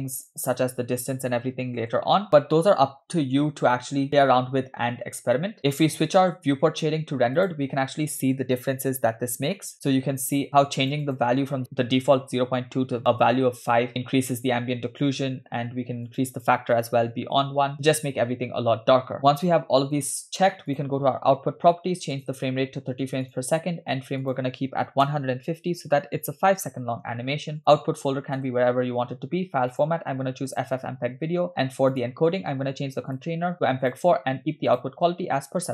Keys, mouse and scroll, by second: 0.2-1.9 drag, 8.4 click, 9.2 scroll up 2, 9.6 middle click, 9.7 scroll up 1, 10.5 click, 11.0-13.4 drag, 16.1-17.5 drag, 19.2 scroll down 2, 20.7 click, 22.2-23.5 drag, 24.2-26.0 drag, 26.9-27.2 scroll down 2, 27.6-28.5 drag, 28.4 /, 29.7-30.8 drag, 31.3-31.9 scroll down 3, 32.0 click, 32.3-33.1 scroll down 2, 33.1-34.1 drag, 34.7-35.7 drag.